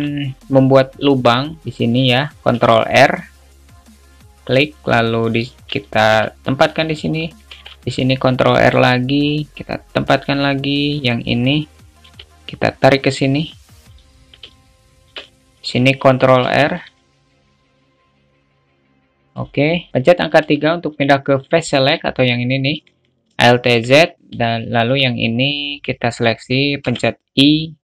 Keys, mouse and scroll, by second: 0.0 shift+middle click, 2.8 ctrl+r, 6.1 shift+middle click, 7.8 ctrl+r, 14.7 shift+middle click, 18.1 g, 22.9 alt+z, 23.7 shift+middle click.